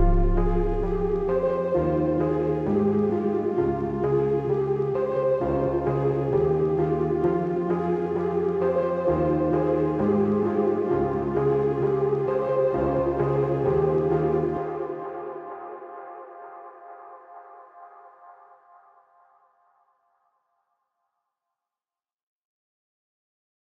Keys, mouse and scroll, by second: 1.5 click, 4.2 click, 4.3-7.7 typing, 4.6 click, 5.3 click, 5.5 click, 5.8 click, 6.1 click, 6.5 click, 6.7 click, 7.3 click, 7.6 click, 8.5 click, 10.3-11.9 typing, 10.6 click, 11.0 click, 11.3 click, 11.6 click, 13.0-15.1 typing, 13.5 click, 13.7 click, 14.0 click, 14.2 click, 14.5 click, 14.7 click, 16.6 click, 20.5 alt+scroll down 1, 21.1 alt+scroll up 1, 21.5-22.1 alt+scroll down 2, 22.2 scroll up 1, 22.4-23.0 scroll down 2.